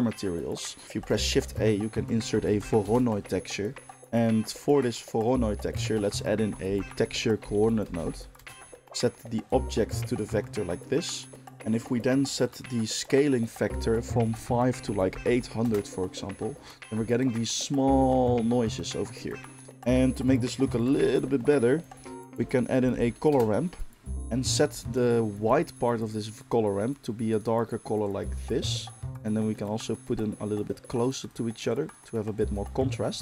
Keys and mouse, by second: 0.9 shift+a, 5.8 shift+a, 9.5-24.1 drag, 20.8 shift+a, 24.1-26.7 middle drag, 26.7 click, 27.4-29.1 middle drag, 29.1-33.2 drag.